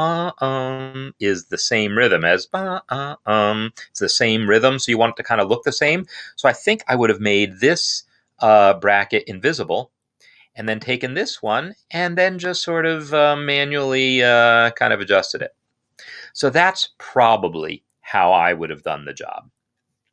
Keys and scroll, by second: 9.0 v, 15.9 Escape.